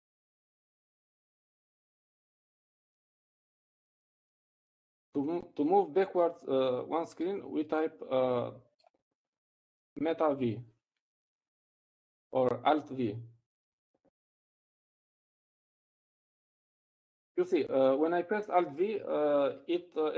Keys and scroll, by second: 2.9 ctrl+v, 18.9 alt+v.